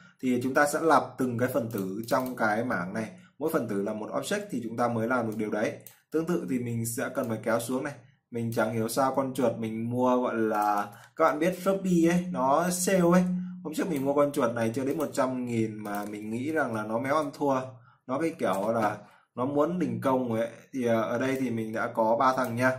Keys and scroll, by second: 11.6 ctrl+v, 16.8 ctrl+v, 18.2 ctrl+s.